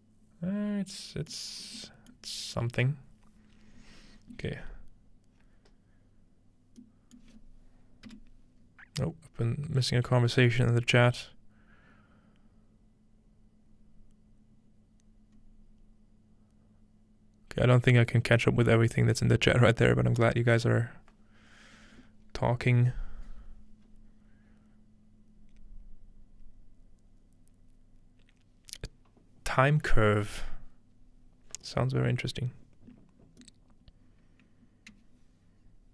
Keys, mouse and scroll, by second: 1.6 middle click, 8.1-9.1 middle drag, 33.4-35.9 middle drag.